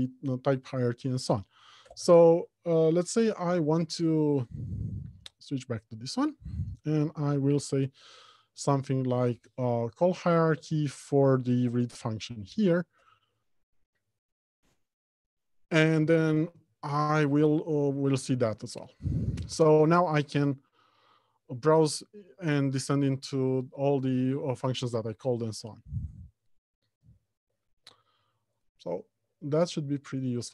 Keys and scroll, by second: 12.8 ctrl+alt+h, 17.4 Down, 20.9 Right, 21.6 Down, 21.9 Right, 22.4 Down, 24.6 Right, 25.1 Down, 25.8 Right, 26.1 Down, 27.2 Right.